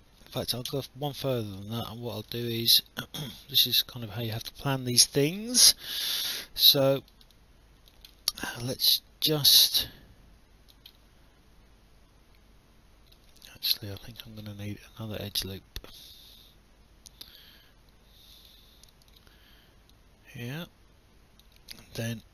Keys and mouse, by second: 0.7 Delete, 1.3 alt+click, 2.4 alt+click, 2.9 right click, 5.4 right click, 6.7 click, 7.3 alt+click, 8.3 alt+middle click, 8.5 alt+click, 10.9 alt+middle click, 13.5 alt+click, 15.3 right click, 18.3 click, 22.0 Escape.